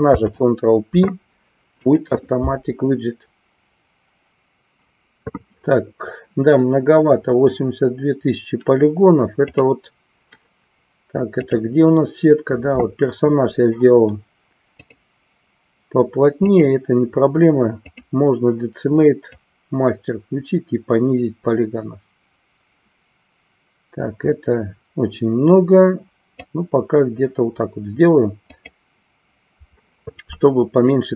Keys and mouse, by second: 9.5 click, 16.4-18.2 drag, 19.4-26.6 drag, 28.6 click.